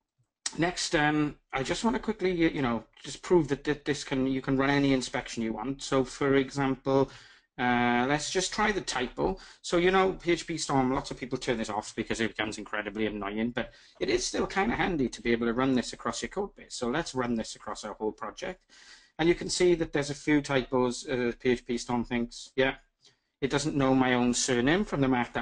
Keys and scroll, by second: 5.2 ctrl+alt+shift+super+i.